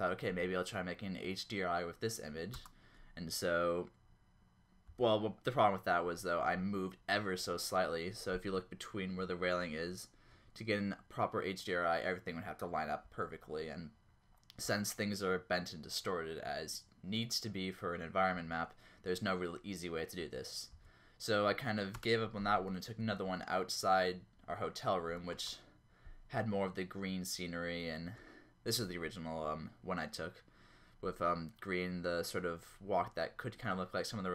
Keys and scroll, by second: 4.9 Up, 10.3 Down, 13.0 Up, 14.6 Down, 18.5 Up, 20.2 Down, 20.7 Up, 22.0 space, 23.0 Down, 25.5 space, 28.1 Down.